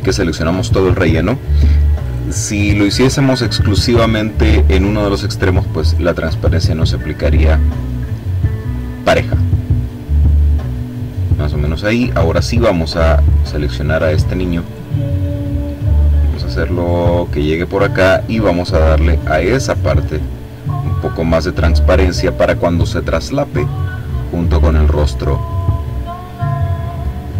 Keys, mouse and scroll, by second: 0.1 click, 6.3-7.9 drag, 8.2 click, 9.7 click, 11.6 click, 13.1 click, 14.6-17.8 drag, 18.8-20.6 drag, 21.2 click, 24.2 click, 25.4 click.